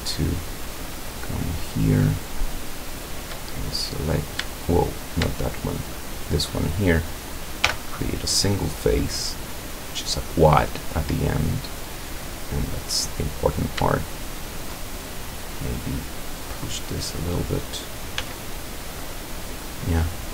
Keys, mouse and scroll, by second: 0.1 shift+right click, 1.4 shift+right click, 2.7 shift+right click, 3.5-4.4 shift+middle drag, 4.7 shift+right click, 6.0 shift+right click, 7.7 f, 8.3-12.9 middle drag, 13.4 right click, 14.4 shift+right click, 15.2-16.7 shift+drag, 17.0-17.5 middle drag, 17.8 scroll down 2, 18.2 z, 18.7 middle click, 19.1-19.8 middle drag, 19.9-20.3 middle drag.